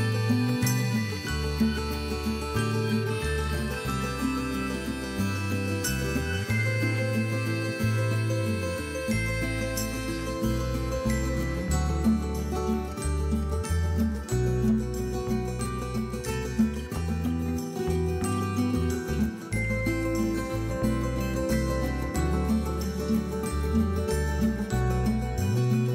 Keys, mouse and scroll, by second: 0.3 KP_3, 0.8 click, 1.3 b, 3.1 click, 3.8 b, 6.5 click, 7.4 b, 8.6 click, 8.8 scroll down 1, 8.8 middle click, 9.2-9.6 scroll up 1, 9.6 click, 9.7 middle click, 10.2 Tab, 10.5 click, 10.6-12.9 middle drag, 11.4 ctrl+KP_7, 11.9 g, 12.9 click, 13.4-14.1 middle drag, 13.4 g, 14.1 click, 14.2 scroll down 2, 14.3-15.9 middle drag, 15.2 scroll down 1, 15.5 KP_1, 15.9 scroll up 1, 16.1 scroll down 1, 16.5 KP_1, 16.7 scroll down 1, 16.9 middle click, 17.2 scroll up 1, 17.4 click, 17.5 middle click, 17.7 KP_1, 17.9 scroll up 1, 18.1-18.5 scroll down 1, 18.5 middle click, 18.5 s, 19.2 click, 19.3-20.4 middle drag, 19.4 scroll down 1, 20.3 scroll down 1, 20.4 click, 20.5-22.1 middle drag, 20.9 scroll up 1, 21.8 ctrl+KP_7, 22.1 click, 22.5 g, 23.3 click, 23.8 g, 24.2 click, 24.3 scroll down 1, 24.3 middle click, 24.7 scroll up 1, 24.8 middle click, 25.0 scroll down 1, 25.1 middle click, 25.5 scroll up 1, 25.7 middle click.